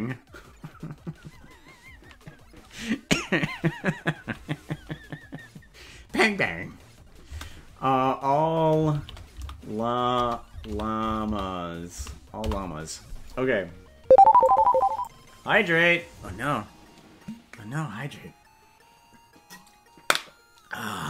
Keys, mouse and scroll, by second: 14.4 click.